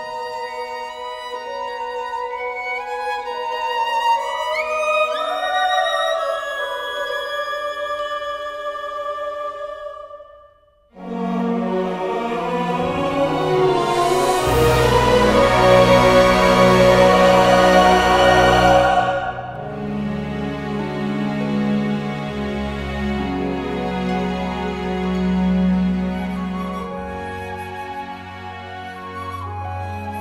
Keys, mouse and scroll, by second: 1.9-3.8 right drag, 3.8 e, 6.0 click, 6.3 middle click, 6.6 KP_1, 7.9 z, 9.4 e, 12.5-14.4 drag, 12.9 f, 13.8 z, 15.2 Tab, 17.0-18.1 drag, 18.4 click, 19.8 Tab, 20.8 a, 21.1 a, 21.5 s, 23.2 Tab, 30.0 Tab.